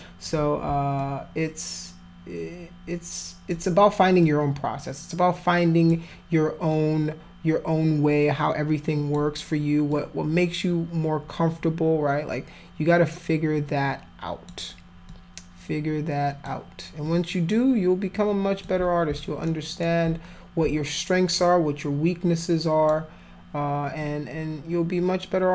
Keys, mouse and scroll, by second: 1.0-3.5 alt+drag, 4.2-5.9 alt+drag, 6.7-9.1 alt+drag, 9.9-14.5 alt+drag, 15.1-16.4 alt+drag, 17.1-18.6 alt+drag, 19.4 alt+middle click, 21.4-22.9 alt+drag, 24.0-25.5 alt+drag.